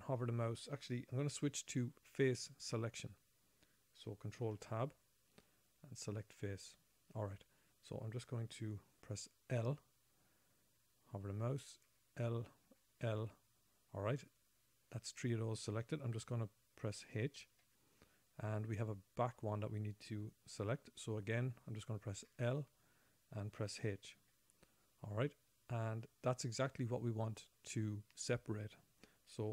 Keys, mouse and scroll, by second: 1.3-2.6 scroll down 3, 5.0 ctrl+Tab, 6.8 ctrl+Tab, 10.0 l, 12.3 l, 13.1 l, 13.7-14.2 scroll down 6, 15.2-16.3 scroll up 1, 18.0 h, 22.7 l, 24.6 h.